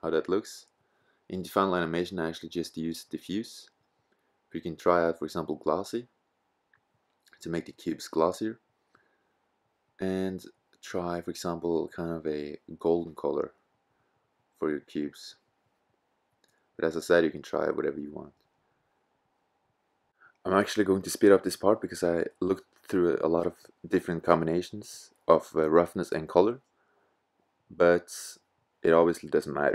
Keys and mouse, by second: 4.9 click, 5.4 click, 8.3-9.5 middle drag, 9.6 middle click, 26.5 click, 27.8 click.